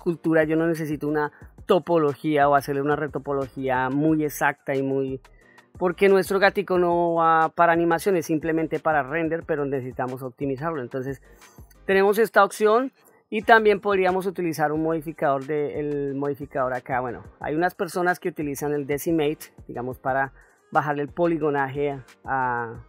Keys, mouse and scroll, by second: 5.2-5.7 middle drag, 6.7-7.3 middle drag, 7.7 middle click, 8.8-9.2 shift+middle drag, 9.7-10.4 ctrl+middle drag, 14.8 click, 17.5 click, 18.2-18.7 ctrl+middle drag, 19.1-19.5 shift+middle drag.